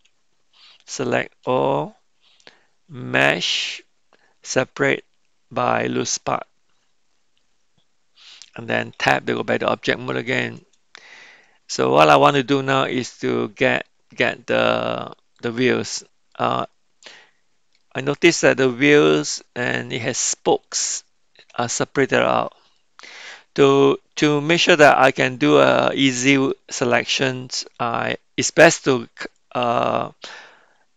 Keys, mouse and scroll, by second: 0.0 Tab, 1.4 a, 3.2-6.5 drag, 9.1 Tab, 11.4-13.8 middle drag, 15.3 click, 16.3-17.7 middle drag, 18.4 middle click, 19.7 click, 20.6 click, 21.6 click, 22.8-26.5 middle drag.